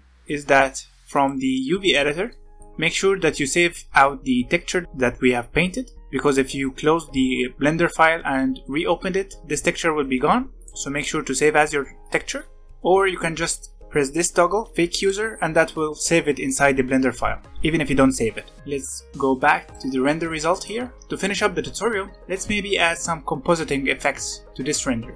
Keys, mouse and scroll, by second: 1.1-2.3 drag, 2.3 scroll down 2, 2.5-4.8 middle drag, 4.8-5.5 scroll up 1, 5.5-7.6 scroll down 1, 10.6 click, 10.9-12.1 drag, 15.0 click, 18.6 click, 20.9-22.2 scroll up 1, 24.0-25.1 middle drag.